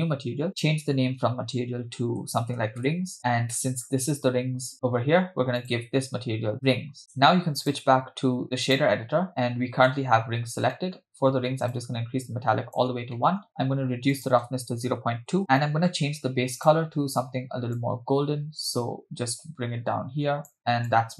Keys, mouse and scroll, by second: 0.5-3.2 drag, 3.6 middle click, 5.6-6.8 drag, 7.6-8.8 drag, 9.3-9.9 middle drag, 10.7 middle click, 11.7-12.8 drag, 13.2 middle click, 13.5-14.1 scroll up 1, 14.1-15.4 drag, 15.6 middle click, 16.9 click.